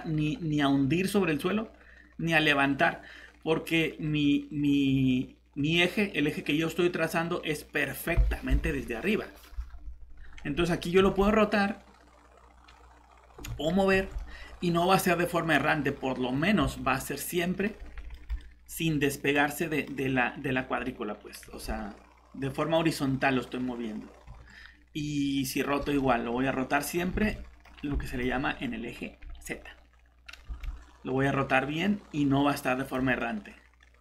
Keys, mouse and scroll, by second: 7.6 middle click, 8.6 alt+Tab, 10.1 scroll down 1, 11.0 r, 13.3 Escape, 13.9 g, 16.6 Escape, 17.0 middle click, 17.8 scroll down 1, 18.1 middle click, 21.4 shift+g, 24.2 Escape, 25.8 r, 27.1 Escape, 27.6 scroll up 1, 28.1 middle click, 28.4-30.4 scroll up 1, 30.4 shift+r, 32.8 click, 33.2 middle click.